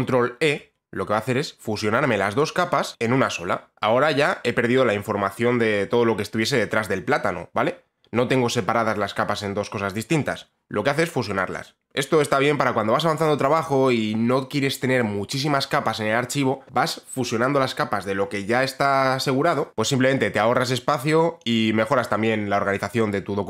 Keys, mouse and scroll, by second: 0.1 ctrl+e, 3.6 click.